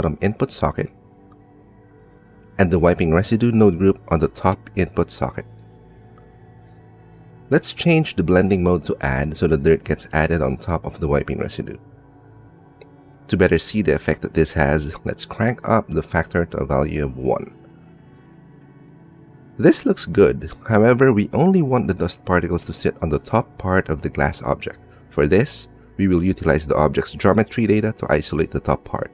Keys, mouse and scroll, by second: 1.2-4.3 middle drag, 2.7 g, 4.3 click, 6.6-8.5 drag, 9.2 click, 10.3 click, 11.5 click, 12.5-14.0 drag, 14.9 click, 15.9 click, 17.4-18.5 drag, 18.9 click, 19.8 middle click, 20.6 middle click, 21.9 middle click, 23.1 click, 23.6 middle click, 24.0 middle click, 24.1 click, 24.8 click, 26.0 shift+click, 26.4 click.